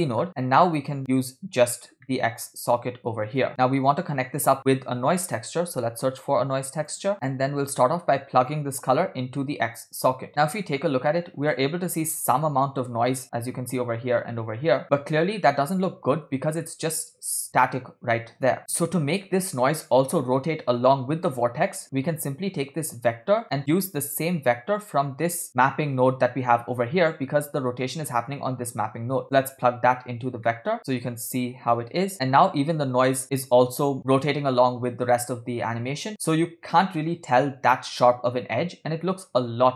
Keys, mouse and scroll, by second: 0.8-2.1 drag, 2.1 middle click, 3.4 click, 3.5-4.0 middle drag, 4.6 shift+a, 8.5-10.1 drag, 10.3 scroll down 2, 10.6 space, 11.6 space, 12.1 space, 12.5 space, 14.2 space, 15.1-15.7 scroll down 3, 15.9 scroll up 2, 16.3 space, 16.7 space, 18.5 space, 19.3 space, 21.0 space, 21.4-22.3 scroll down 5, 21.7 middle click, 23.3-30.0 drag, 30.5 middle click, 30.8-31.4 scroll down 7, 32.3 space, 39.0-39.7 scroll down 3.